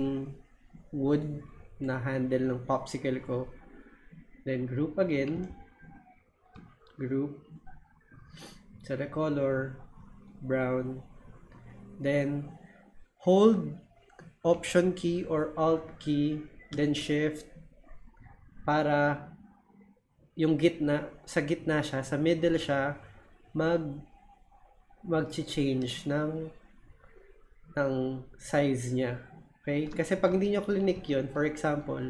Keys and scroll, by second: 30.3 super+z, 30.9 super+z.